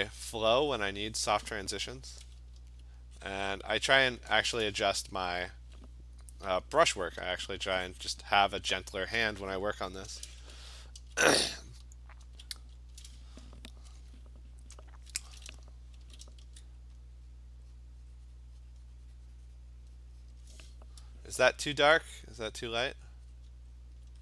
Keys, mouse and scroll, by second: 1.0 click, 3.4 click, 3.5 click, 3.8 click, 4.1 click, 7.3 alt+click, 7.4 alt+click, 8.1 click, 10.1-12.6 typing, 14.9 alt+click, 16.0 [, 16.2 [, 16.4 [, 17.3 click, 17.8 click, 17.8-19.9 alt+click, 18.1 click, 18.4 click, 18.7 click, 19.6 click, 20.3 click, 22.4 alt+click, 22.8 click, 23.4 click, 23.8 alt+click, 24.0 alt+click.